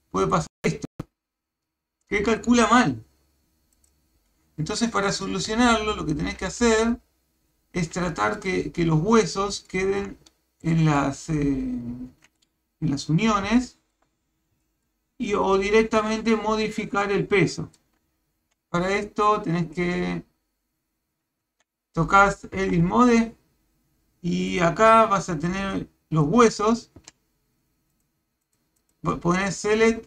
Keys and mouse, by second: 5.5 Tab, 8.1 shift+middle click, 9.6 shift+middle click, 10.7 shift+middle click, 13.5 shift+middle click, 14.6 shift+middle click, 16.1 shift+middle click, 17.4 shift+middle click, 18.4 Tab, 22.6 Tab, 25.8 click, 27.0 a, 27.9 click, 28.4 click, 28.8 click, 29.7 click.